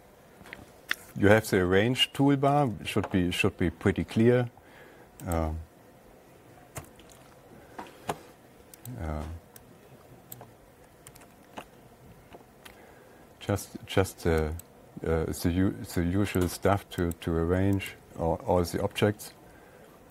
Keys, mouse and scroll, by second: 3.0 alt+Tab, 5.8 click, 7.2 Page_Down, 9.3 click, 10.8 click, 11.6 ctrl+a, 15.1 click, 16.8 click, 17.6 click.